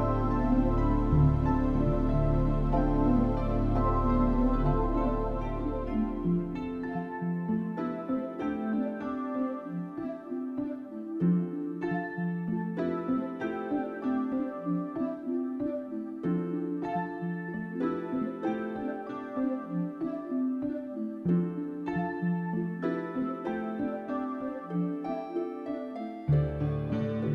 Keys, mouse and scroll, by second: 1.2 click, 2.5 click, 3.3 click, 17.2 Escape, 18.2 Tab, 18.5 middle click, 19.1 click, 19.3 scroll down 3, 19.6 Tab, 19.8 middle click, 23.0 click, 24.7 n, 25.5 t, 25.6 n, 25.6 t, 26.2 click.